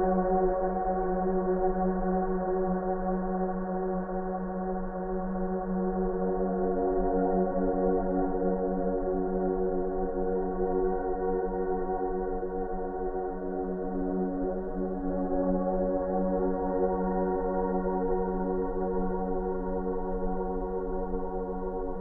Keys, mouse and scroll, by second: 0.2 click, 3.0 ctrl+m, 5.8 ctrl+m, 5.8 click, 9.0-11.3 drag, 13.8 scroll up 1, 14.1-14.5 scroll down 1, 14.5 Return, 15.2 space, 15.3 right click, 15.5 click, 15.8 space, 16.1-16.7 ctrl+drag.